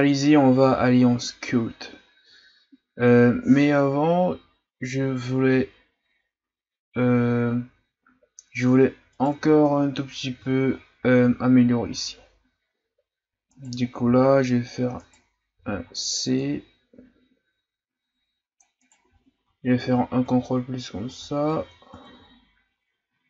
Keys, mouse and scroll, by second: 0.1-1.1 shift+scroll up 2, 1.1-1.8 scroll down 2, 1.8-3.1 scroll up 1, 8.2 scroll up 1, 9.1 right click, 9.3 Tab, 9.8-10.4 ctrl+scroll up 3, 10.4-11.8 ctrl+scroll down 4, 11.8 z, 13.5 right click, 14.2 v, 15.5 c, 19.1 z, 19.8 ctrl+KP_Add, 20.2 ctrl+KP_Add, 21.9 ctrl+KP_Subtract.